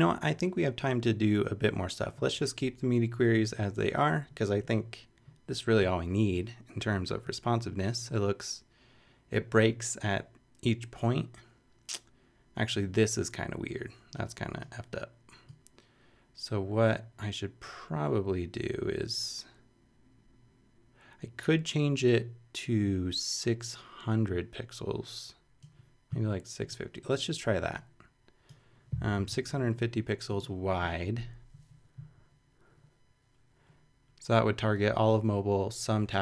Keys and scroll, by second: 28.9-29.7 typing.